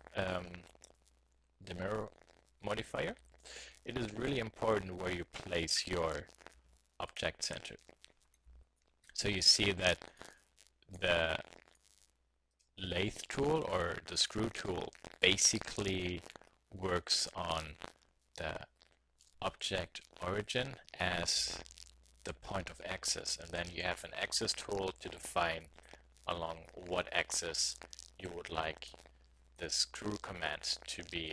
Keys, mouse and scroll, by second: 3.2 g, 7.7 middle click, 8.4 z, 8.7 click, 10.1 click, 11.9-13.6 drag, 23.9-25.7 drag, 25.7 middle click, 26.6-28.4 drag, 28.4 middle click, 29.4 middle click, 29.7 click, 30.0 click, 30.2 middle click, 30.6 middle click, 30.9 middle click.